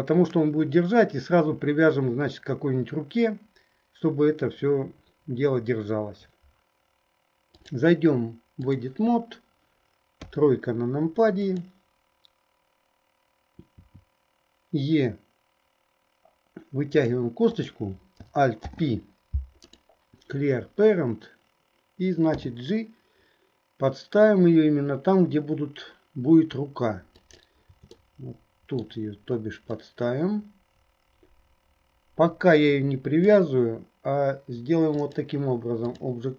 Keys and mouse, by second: 7.6-9.0 drag, 10.2 KP_3, 11.5 click, 17.5 click, 18.8 alt+p, 28.2 middle click, 30.0-33.3 drag, 35.0-36.3 drag.